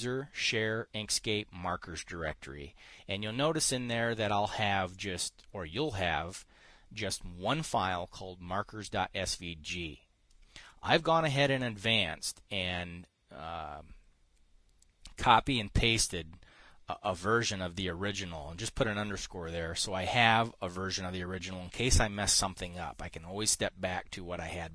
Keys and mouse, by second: 5.4 click, 20.6 click.